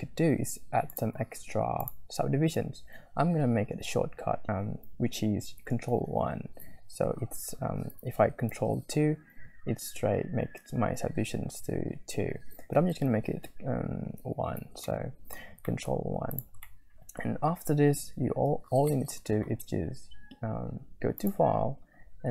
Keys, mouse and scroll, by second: 0.9 click, 1.8 middle click, 2.5-5.6 drag, 6.1 ctrl+1, 9.1 ctrl+2, 14.3 ctrl+1, 14.9 middle click, 15.4 scroll up 1, 15.7 shift+middle click, 16.3 middle click, 16.4 scroll up 2, 16.7 middle click, 18.5 `, 18.9 middle click, 19.1 scroll up 1, 21.2-22.3 drag.